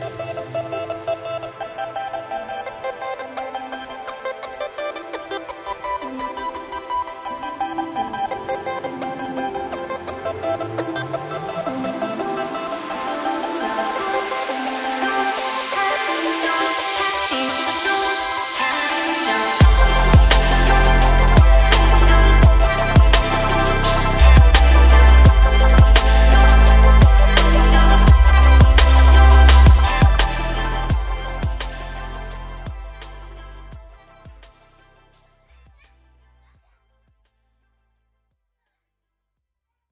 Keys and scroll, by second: 0.1 Tab, 5.3 Tab.